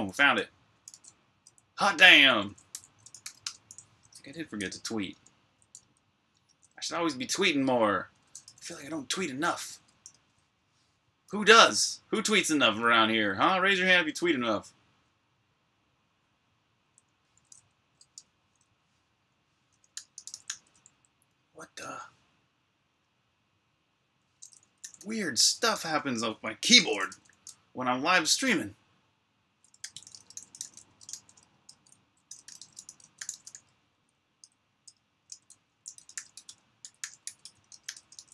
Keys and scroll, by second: 0.0-3.7 typing, 5.7 super+Tab, 8.3 super+l, 19.5-22.2 typing, 21.6 Return, 24.4-27.1 typing, 28.9-34.2 typing, 34.7 Return, 35.1 Return, 35.5-36.7 typing.